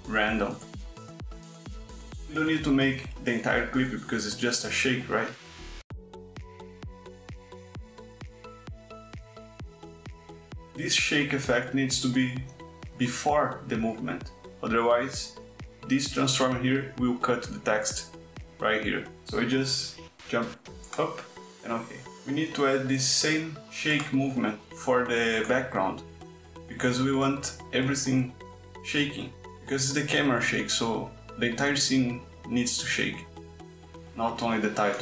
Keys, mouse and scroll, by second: 0.5 Right, 1.0 Right, 1.2 click, 1.6 click, 2.0 Right, 2.3 click, 2.9 click, 5.4 click, 6.9 space, 9.8 space, 19.0 click, 20.3 click, 25.4 click, 26.8 click, 28.0-34.7 drag.